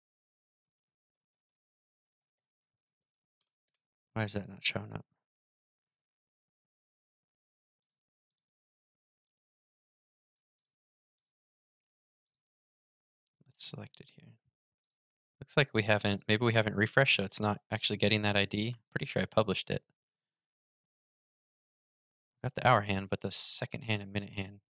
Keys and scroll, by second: 17.0 super+r.